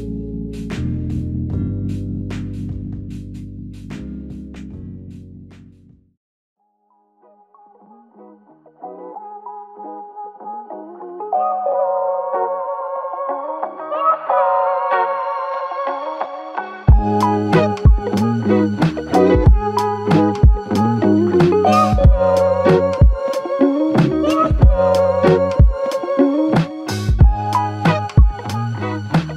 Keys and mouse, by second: 1.2 alt+click, 2.2 double click, 5.3 alt+click, 6.5 shift+click, 8.1 shift+click, 9.5 shift+click, 10.7 alt+click, 12.8-13.5 typing, 15.9 double click, 20.4 q, 20.7 r, 22.7 double click, 25.0 shift+click, 26.4 shift+click, 27.2 double click.